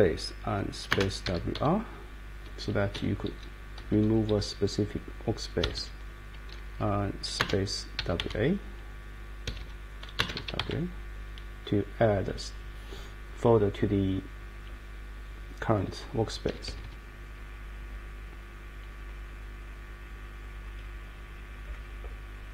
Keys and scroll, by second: 0.9 space, 1.2 w, 1.5 r, 2.9 Down, 3.3 Up, 3.5 space, 3.8 Down, 4.3 Up, 5.6 Escape, 7.4-8.7 typing, 9.5 Escape, 9.6 Escape, 10.1-11.1 typing, 16.4 Escape, 16.7 Escape, 16.8 Escape, 18.4-20.1 Down, 20.3 Down.